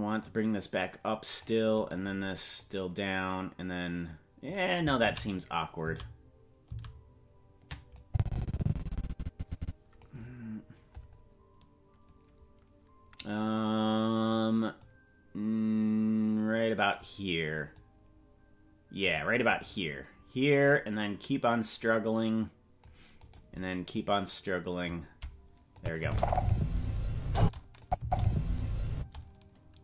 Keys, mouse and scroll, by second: 0.2-1.5 drag, 1.9 right click, 2.6-4.5 drag, 5.5 ctrl+z, 6.3 ctrl+z, 7.1 ctrl+z, 8.0-10.0 drag, 14.8-17.0 drag, 17.7-19.1 drag, 19.6-20.6 right drag, 20.6-22.9 drag, 23.3 right click, 23.9 click, 25.8 click, 26.0 space, 27.4 space, 27.8-29.1 drag, 28.0 space, 28.9 space.